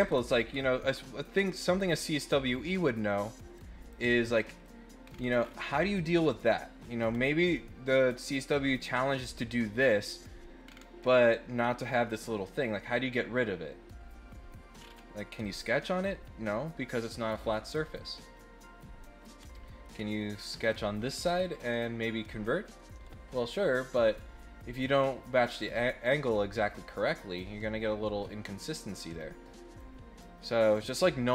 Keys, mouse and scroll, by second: 0.1-0.5 scroll up 4, 3.5 click, 4.6 middle click, 5.0 scroll down 1, 5.3 scroll up 1, 7.1 scroll down 1, 7.5 middle click, 10.6 scroll down 1, 11.0 scroll up 1, 11.4 middle click, 14.7 scroll up 1, 15.4 click, 19.3 middle click, 19.5 middle click, 20.2 middle click, 20.6 click, 23.3 middle click, 29.8 click, 30.6 click.